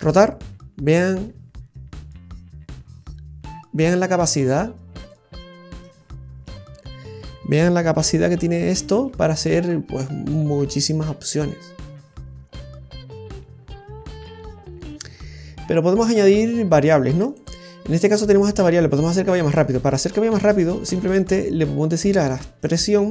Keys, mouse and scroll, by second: 8.0 r, 19.5 right click, 20.3 right click.